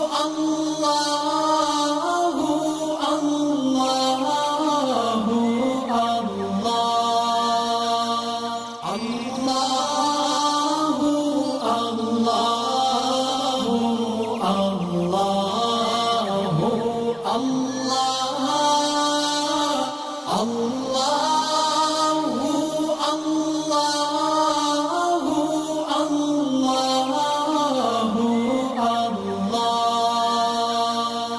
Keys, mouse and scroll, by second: 5.9 click, 12.5 alt+scroll up 1, 13.0 space, 13.0 click, 13.1 click, 18.7 alt+scroll up 1, 19.8 click, 22.2 click, 25.6 click, 30.2 click.